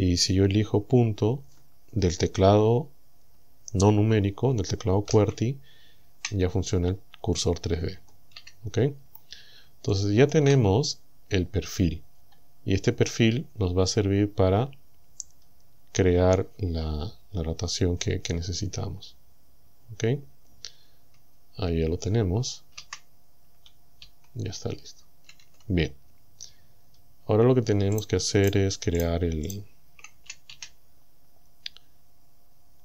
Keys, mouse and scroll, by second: 5.1 ., 8.4 a, 8.9-9.3 scroll down 2, 9.9 shift+middle click, 10.9 scroll down 2, 12.1-12.5 scroll down 2, 12.7 scroll down 2, 13.9 scroll up 2, 14.5 scroll up 2, 15.3-15.6 scroll down 2, 21.2 Tab, 22.8 KP_1, 24.1 KP_7, 25.5 Tab, 26.6-26.9 scroll up 2, 28.0 right click, 28.5 shift+right click, 29.0 shift+right click, 29.5 shift+right click, 30.5 a, 32.5-32.8 scroll up 2.